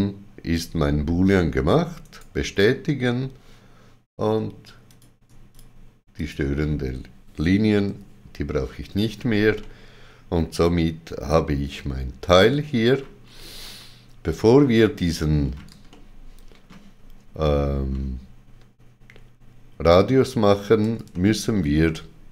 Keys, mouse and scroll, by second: 2.0 right click, 4.9 click, 5.6 shift+click, 6.2 shift+click, 9.6 middle click, 12.8-13.2 scroll up 2, 15.9 ctrl+middle click, 21.1 ctrl+middle click.